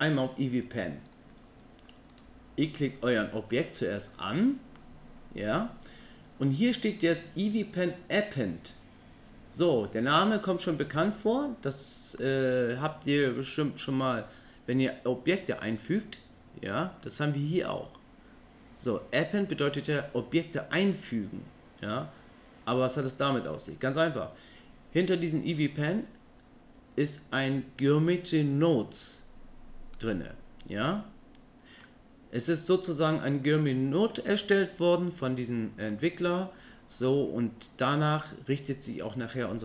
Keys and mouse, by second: 0.6 click, 2.6-3.5 middle drag, 14.0-19.8 drag, 30.0-31.8 middle drag, 33.2 middle click, 35.9 middle click.